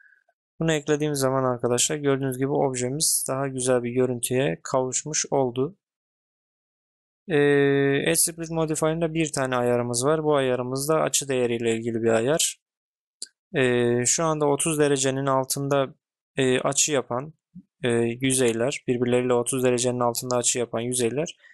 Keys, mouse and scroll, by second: 2.1-2.5 middle drag, 3.5 click, 3.7-7.1 middle drag.